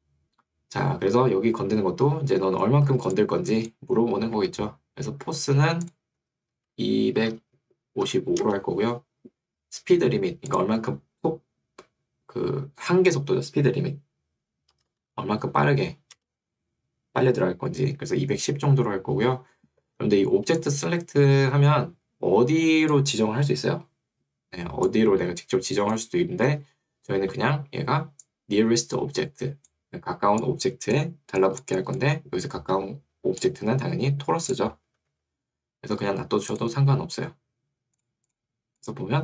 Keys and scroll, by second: 4.4 Escape, 7.0-8.2 typing, 8.4 Return, 14.8-15.7 typing, 16.2 Return, 26.6 Escape, 35.2 Escape.